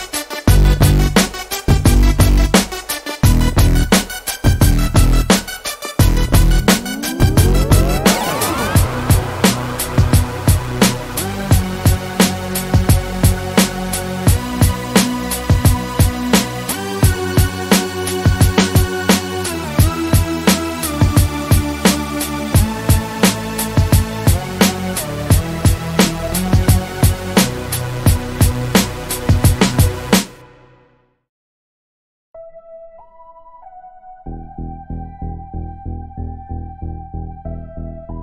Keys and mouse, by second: 1.7 a, 2.1 Tab, 2.8-3.6 middle drag, 4.0 middle click, 15.8 click, 16.0 click, 16.4-16.9 drag, 16.9 KP_1, 17.2 z, 20.4 Tab, 21.8-22.8 middle drag, 23.4-23.8 middle drag, 25.5-26.4 middle drag, 26.4-27.5 drag, 27.5 z, 28.0 a, 28.5 Tab, 36.3 shift+d, 37.7 KP_1.